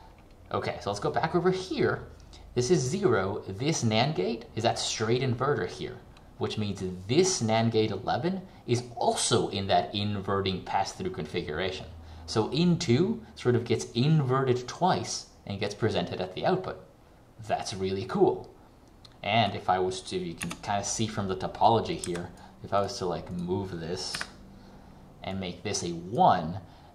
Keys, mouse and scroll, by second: 19.6 click, 24.2 Delete, 25.4 click.